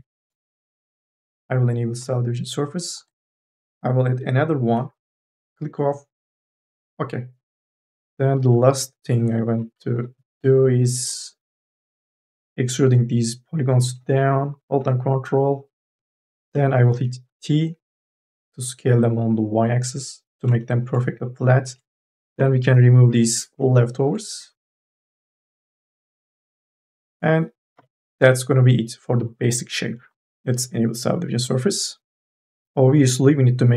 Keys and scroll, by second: 3.2 t, 7.8 q, 9.7 3, 10.0 e, 11.4 e, 17.1 t, 22.2 Delete, 24.6 Delete, 27.6 n, 27.8 b.